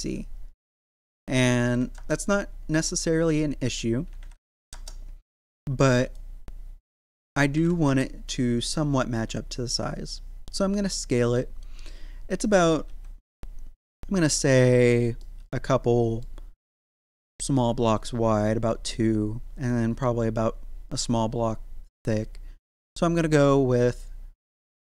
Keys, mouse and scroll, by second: 1.0 click, 3.7 click, 6.0 click, 10.7 middle click, 11.6 scroll up 1, 12.4 middle click, 12.8 z, 14.8 scroll down 1, 15.2-23.7 middle drag, 23.7 click.